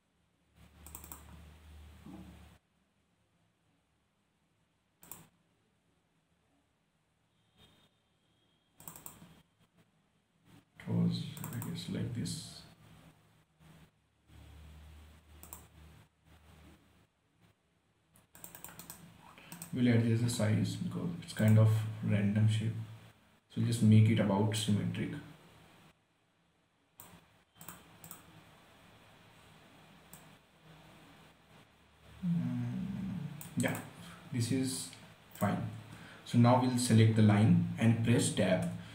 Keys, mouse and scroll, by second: 1.2 click, 5.3 click, 9.1 click, 11.7 click, 15.8 click, 18.7 click, 19.1 right click, 19.6 scroll up 1, 19.9 right click, 20.3 scroll up 1, 21.8 click, 22.1-22.4 scroll down 1, 23.1-24.9 scroll up 1, 25.0-34.0 drag, 34.4-35.1 scroll down 1, 35.1-35.6 scroll up 1, 35.7 click, 36.3 scroll down 1, 37.4 scroll up 1.